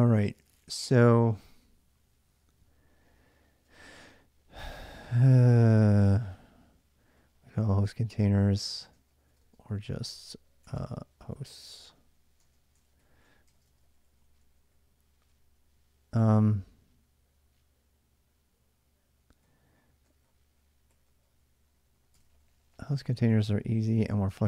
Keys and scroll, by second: 0.6 j, 1.2 j, 1.6 j, 2.7-16.8 typing, 19.2-23.6 typing.